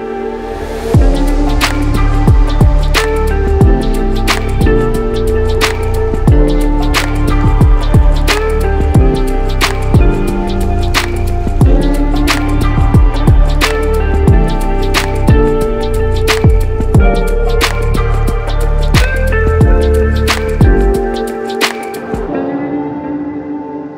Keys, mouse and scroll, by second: 1.8-4.5 drag, 2.5-3.3 typing, 3.9 Return, 5.3 click, 6.7 click, 7.5 click, 8.3 click, 9.1 click, 10.0 click, 10.5 drag, 13.6-16.0 drag, 14.6 0, 14.8 ., 15.1 8, 15.4 Return, 16.6-18.3 drag, 17.1 0, 17.2 ., 17.4 1, 17.6 Return, 18.5-20.0 drag, 21.1-22.4 alt+middle drag.